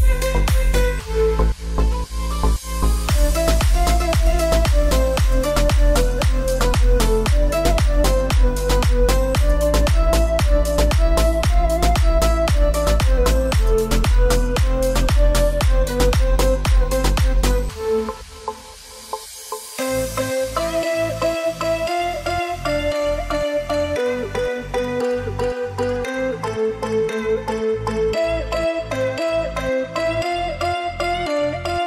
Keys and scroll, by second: 16.7 space, 27.3 space, 28.0 space, 29.0 space.